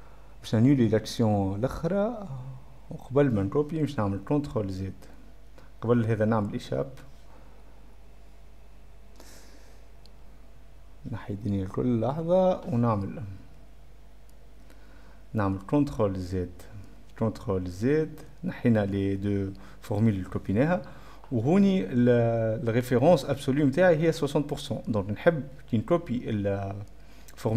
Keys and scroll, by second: 3.2-4.0 typing, 4.9 ctrl+z, 6.0 Escape, 6.8 Escape, 12.6-14.8 typing, 16.2 ctrl+z, 16.6 \, 17.6 ctrl+z.